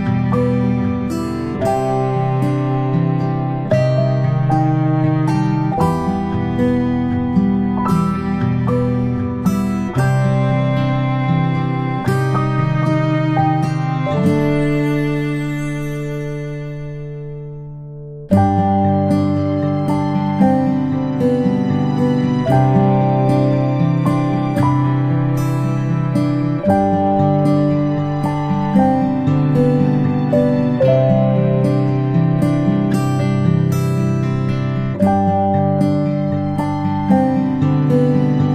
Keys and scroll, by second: 14.9 g, 23.5 ctrl+space, 24.5 p, 28.0-28.4 space.